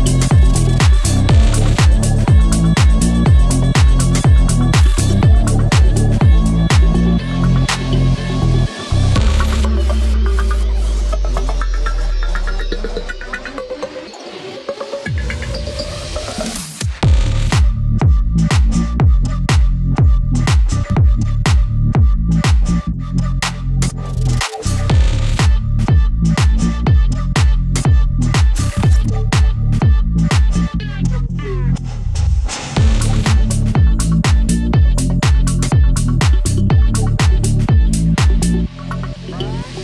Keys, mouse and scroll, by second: 3.5 click, 9.6 click, 20.7 click, 22.2 scroll down 1, 23.2-25.0 drag, 25.0 scroll up 1, 25.6 scroll down 1, 27.8-28.2 scroll up 1, 28.2-30.2 drag, 30.2 scroll down 1, 30.9 click, 34.3-34.6 scroll down 1, 34.6-35.0 scroll up 1, 35.7 scroll down 1, 36.4 ctrl+a, 36.9 shift+F2, 38.1 click.